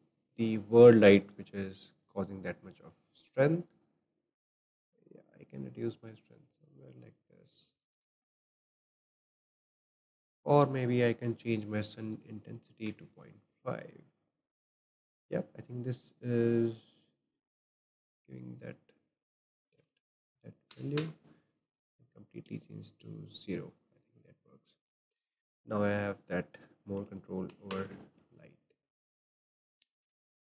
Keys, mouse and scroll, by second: 0.3-2.0 drag, 2.0-3.6 shift+middle drag, 3.6-7.0 drag, 7.7 ctrl+z, 7.9-8.5 drag, 8.6-11.6 shift+middle drag, 11.8-22.0 drag, 24.7 click, 26.8-29.8 drag, 30.0 click.